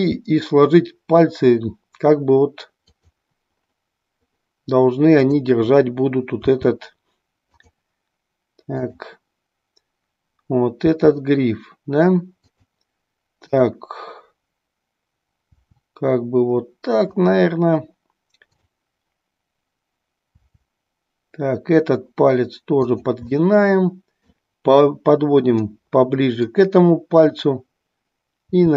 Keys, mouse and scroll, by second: 0.0 g, 5.3-6.5 drag, 6.6 r, 8.7-10.0 drag, 11.0 r, 12.5 click, 13.5-15.0 drag, 15.7 r, 17.3 click, 18.5-19.7 drag, 20.4 r, 23.4-24.5 middle drag, 25.8-26.7 middle drag, 28.4 r.